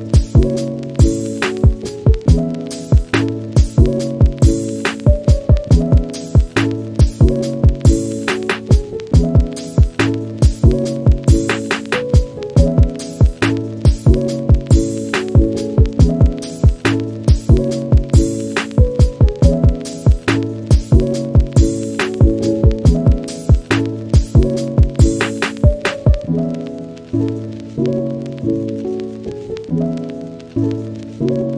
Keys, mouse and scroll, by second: 0.0 click, 0.1 scroll down 2, 0.4 click, 0.6-0.9 middle drag, 0.9 scroll down 1, 1.0 shift+middle click, 1.1 scroll up 1, 1.3 click, 1.4 shift+middle click, 1.6 scroll down 1, 1.8 middle click, 2.2-4.4 scroll up 1, 4.4-9.4 scroll up 1, 9.4-13.6 scroll up 1, 13.6 click, 14.1 KP_Decimal, 14.6 scroll up 1, 14.8-15.2 middle drag, 15.2 scroll down 1, 15.8 click, 18.0-18.6 middle drag, 18.6 scroll up 2, 18.9 click, 19.0 middle click, 19.1 Tab, 19.4 scroll up 2, 19.6 click, 20.0 click, 20.2 shift+middle drag, 20.4-23.2 scroll down 1, 23.2 middle click, 23.4-24.3 scroll up 3, 23.5 shift+middle click, 24.3 g, 24.7-25.1 scroll down 1, 25.1 middle click, 25.2 Tab, 25.5-25.8 scroll down 1, 25.8 click, 26.0 shift+middle click, 26.1-27.1 scroll up 1, 27.1 shift+middle click, 27.2 scroll up 2, 27.5-28.0 middle drag, 28.0 scroll up 1, 28.3 click, 28.3-28.7 middle drag, 28.7 scroll up 1, 28.7 Tab, 29.0 2, 29.2 alt+click, 29.5 shift+middle click, 29.6 scroll up 1, 29.7-30.2 middle drag, 30.2 click, 30.5 scroll down 3, 30.5 Tab, 30.6 click, 30.8-31.5 middle drag.